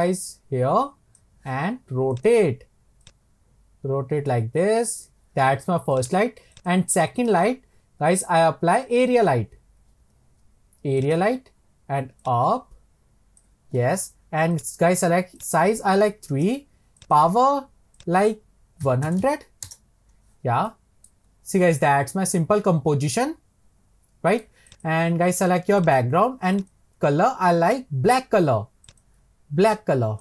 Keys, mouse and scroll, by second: 2.1-3.2 drag, 5.1 click, 5.9-9.6 drag, 14.5 click, 15.4-19.2 drag, 20.7-21.3 middle drag, 21.3 scroll down 3, 21.8-24.7 middle drag, 24.7 click, 25.8 click, 26.5-29.0 drag.